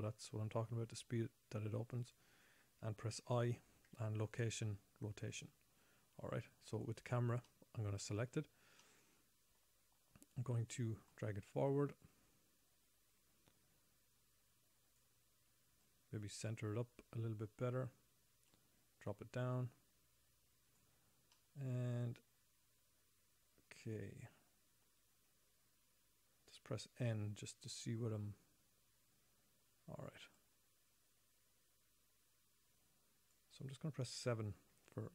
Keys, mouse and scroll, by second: 3.6 i, 7.1 click, 7.8 middle click, 9.3 middle click, 10.5 scroll down 3, 16.2 click, 18.9 click, 21.7 middle click, 24.8 middle click, 27.5 n, 30.7 click, 31.1 click.